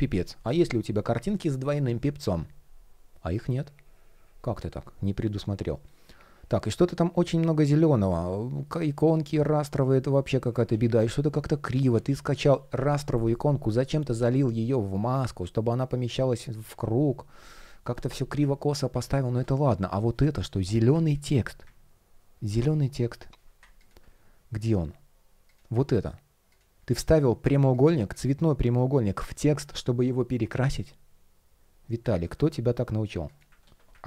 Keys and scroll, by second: 6.1 shift+o, 8.3 shift+p, 9.7 shift+p, 10.4 super+z, 12.0 shift+o, 13.8 shift+p, 16.0 shift+o, 20.0 shift+o, 22.0 super+\, 33.3 super+c.